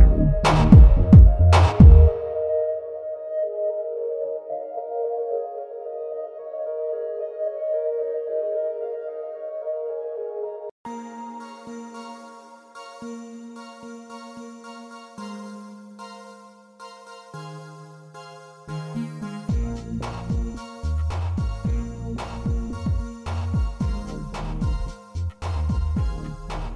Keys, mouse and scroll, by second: 2.6 x, 5.8-8.1 middle drag, 8.7 Tab, 9.1 middle click, 10.0 shift+middle drag, 10.4 middle click, 10.9 shift+middle drag, 13.9 click, 14.8-15.2 shift+middle drag, 16.9 click, 18.1-20.0 drag, 20.6 middle drag, 22.2-25.2 drag, 26.2-26.5 shift+middle drag.